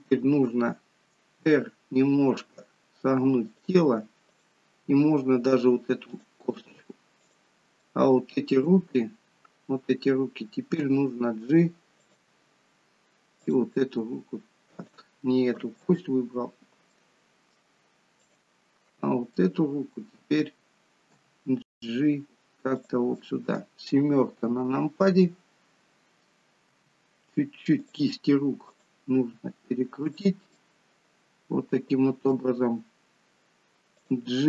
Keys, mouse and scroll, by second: 1.6 r, 4.4 click, 5.0 r, 7.3 click, 7.9 middle click, 10.9 g, 13.5 click, 14.1 g, 16.1 ctrl+z, 17.0 middle click, 18.4 click, 19.4-21.1 scroll down 1, 21.3 g, 23.0 middle click, 24.2 KP_7, 26.6 r, 28.6 click, 29.1 r, 30.5 middle click, 33.9 click.